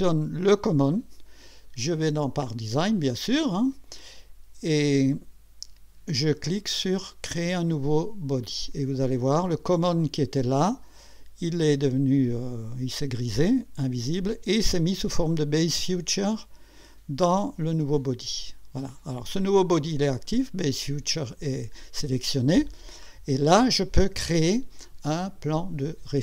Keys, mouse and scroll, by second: 2.5 click, 3.4 click, 4.9 click, 8.4 click, 17.8 click.